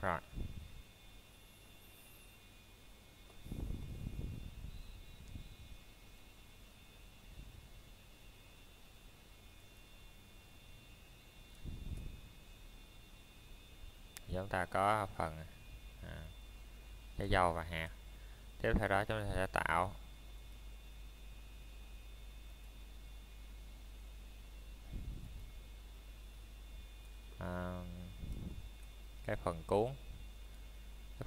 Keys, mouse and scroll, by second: 0.7 middle click, 2.5-2.9 scroll up 1, 2.9 middle click, 5.8 scroll down 1, 6.2 middle click, 7.7-8.1 scroll up 1, 8.1 middle click, 8.5 scroll down 1, 9.0 middle click, 9.6 scroll up 1, 10.0 middle click, 13.5-13.9 scroll down 1, 13.9 middle click, 14.6-15.1 scroll up 1, 15.1 middle click, 15.4-16.6 scroll down 1, 25.1 click, 27.0 middle click, 27.6 shift+middle click, 28.1 scroll up 1, 29.7 middle click, 30.2 shift+middle click, 30.6 scroll up 1.